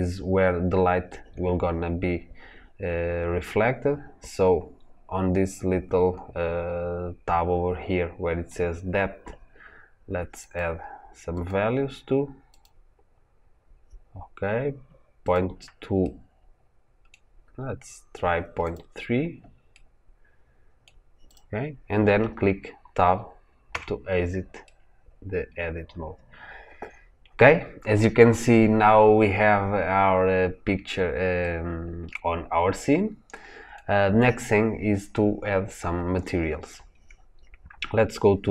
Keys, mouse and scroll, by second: 10.4-15.9 drag, 15.9-18.6 middle drag, 18.6-19.7 drag, 19.7-21.2 middle drag, 21.2 click, 23.6 Tab, 24.5-29.8 middle drag, 29.8-30.3 scroll up 2, 30.3-30.7 scroll down 2, 30.7-31.3 scroll up 2, 31.3-38.5 middle drag.